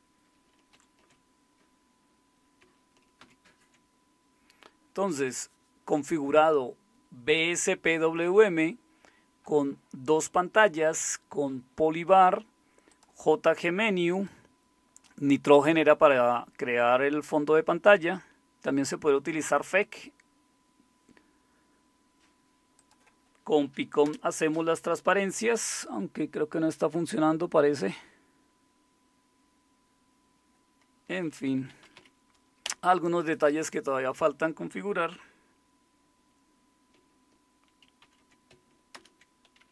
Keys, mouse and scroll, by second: 0.7 super+7, 0.7 Return, 0.7 typing, 3.2 super+w, 14.3-16.1 drag, 24.0 super+Return, 31.2-32.4 typing, 32.6 Return, 38.0 super+6, 38.9 super+Return.